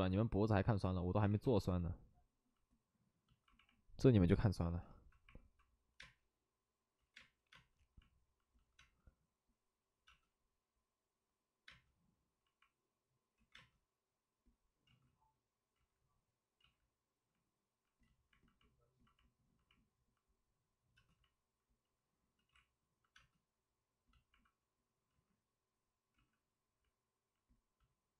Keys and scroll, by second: 0.7 ctrl+z, 0.8-1.7 typing, 5.9 5, 5.9 space, 6.9 ctrl+z, 7.1 space, 13.2 space, 13.3 ctrl+z, 13.5 space, 15.7 ctrl+z, 22.3 ctrl+z, 23.1 space, 25.1 ctrl+z.